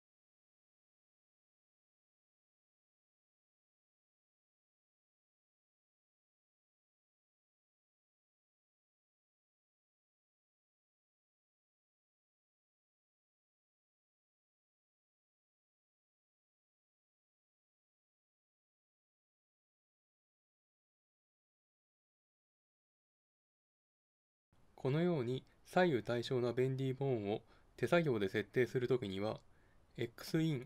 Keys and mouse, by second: 0.3-2.3 drag, 5.3-7.3 drag, 7.3-9.2 drag, 9.3-11.9 middle drag, 12.1-14.0 drag, 14.0-15.0 middle drag, 15.0-17.0 drag, 18.0-19.7 drag, 19.7 middle click, 20.3 middle click, 21.2-23.6 drag, 23.6-24.7 middle drag, 29.2-30.6 drag.